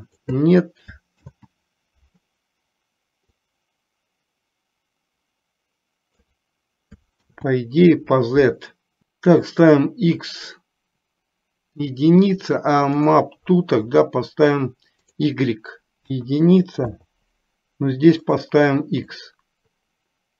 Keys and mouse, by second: 1.4 ctrl+z, 3.4-6.5 drag, 7.4 ctrl+z, 15.1-17.0 drag, 18.3-19.4 drag.